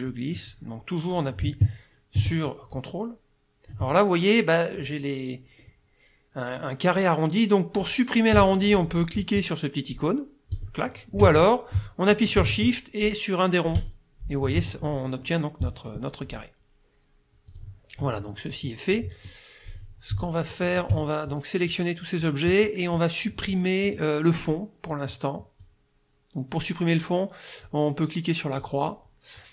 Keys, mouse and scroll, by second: 0.1-3.9 drag, 10.6 click, 11.2 ctrl+z, 13.8 shift+click, 17.5 click, 19.0 click, 19.7 click, 20.2 shift+click, 20.7 shift+click, 25.6-27.9 drag, 28.6 click.